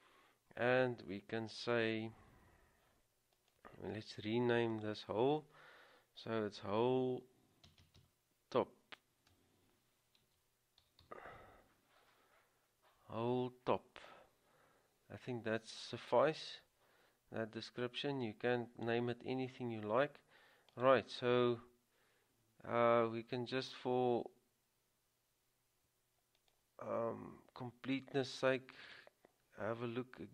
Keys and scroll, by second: 6.8 w, 10.8-11.5 typing.